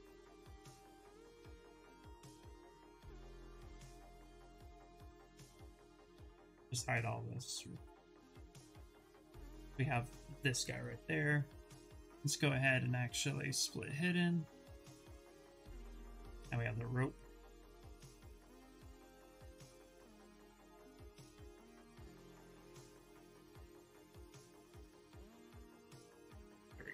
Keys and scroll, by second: 1.1 ctrl+shift+z, 10.6 ctrl+w, 11.4 2, 20.0 w, 26.3 q.